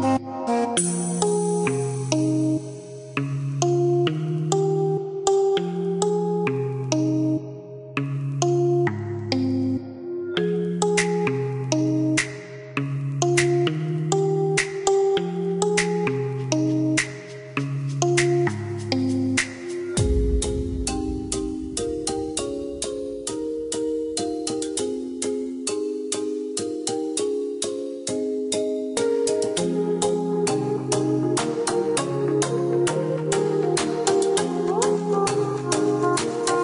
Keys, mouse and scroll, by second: 1.1 click, 2.0 click, 2.7 KP_4, 3.1 KP_Enter, 3.8 Escape, 5.9 click, 6.7 space, 7.6 click, 12.6 KP_0, 13.1 KP_2, 13.7 KP_Enter, 15.7 click, 17.4 click, 19.5 space, 20.3 click, 20.9 click, 24.1 click, 28.7 click, 31.1 click, 31.7 click, 32.5 KP_0, 32.7 KP_Decimal, 33.0 KP_6, 33.5 KP_Enter, 34.1 KP_Enter, 35.4 ctrl+click.